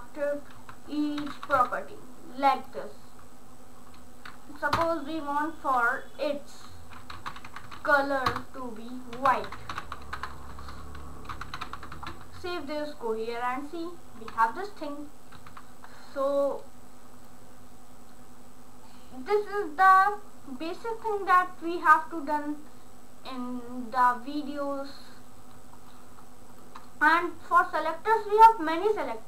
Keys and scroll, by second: 0.6 Delete, 1.0-2.1 typing, 4.8 Return, 7.0-12.1 typing.